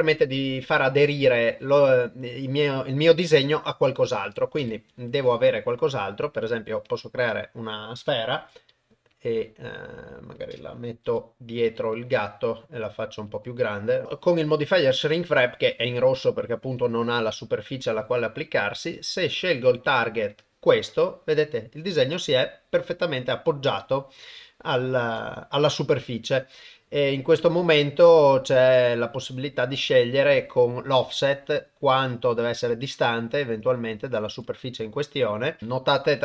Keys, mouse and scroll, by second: 0.7 middle click, 2.7 middle click, 4.6 shift+a, 7.3 middle click, 8.4 g, 11.1 g, 12.1 middle click, 12.7 g, 13.4 middle click, 14.0 ctrl+2, 16.4 middle click, 21.0-24.3 middle drag, 24.5 ctrl+middle click, 25.2 shift+middle click, 25.6-27.7 middle drag, 27.9 ctrl+middle click, 28.6 middle click, 29.4 ctrl+middle click, 31.3-34.3 shift+drag, 34.6 middle click, 35.7-36.2 drag.